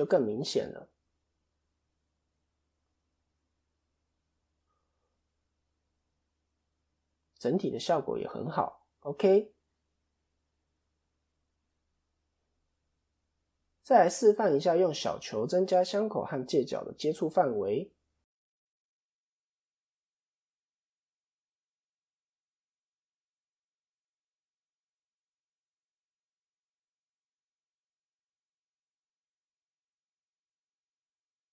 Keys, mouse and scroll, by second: 0.0-0.4 scroll down 2, 0.3 middle click, 2.2 KP_1, 3.1 KP_3, 4.3-4.8 scroll down 1, 4.3 KP_3, 4.8 KP_1, 5.7 ctrl+KP_3, 6.5 KP_7, 7.5-8.4 scroll up 2, 8.4 KP_3, 9.6-10.0 scroll down 2, 10.0 middle click, 11.1-11.6 scroll up 3, 11.7 shift+middle click, 12.4-13.2 scroll up 3, 12.7 shift+middle click, 13.3 middle click, 14.2-14.5 scroll down 2, 15.0 middle click, 15.8 scroll up 1, 16.8 middle click, 19.2 scroll down 1, 19.4 middle click, 20.6-21.1 scroll down 2, 21.1 KP_1, 21.2-21.6 scroll down 2, 22.1 shift+a, 24.5 ctrl+2, 26.0 Tab, 26.8 s, 28.4 click, 30.0 KP_3.